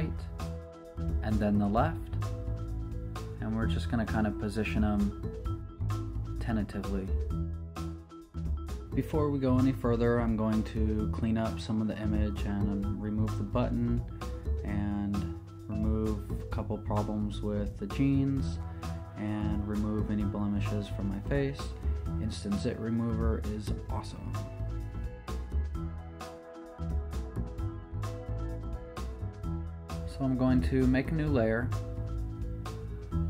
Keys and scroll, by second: 1.3 super+v, 7.5 z, 20.4 z, 22.0 s, 29.3 z, 31.5 super+n, 32.9 Escape.